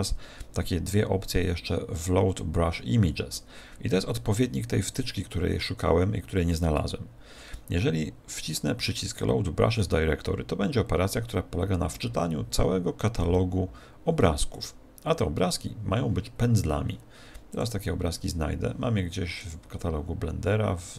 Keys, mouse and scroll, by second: 0.5 scroll down 3, 5.0 click, 14.5 click.